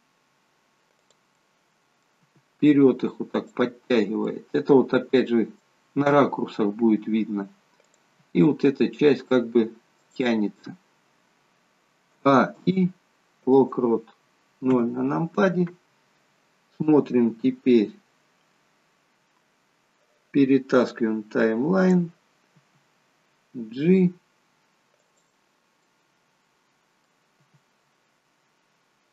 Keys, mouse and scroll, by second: 1.4 middle click, 2.4 g, 4.3 middle click, 6.1-6.7 scroll down 3, 7.1 scroll down 1, 8.0 click, 8.3 g, 12.2 a, 12.7 i, 14.8 KP_0, 21.1 click, 22.6 g, 25.9 middle click, 27.5 g.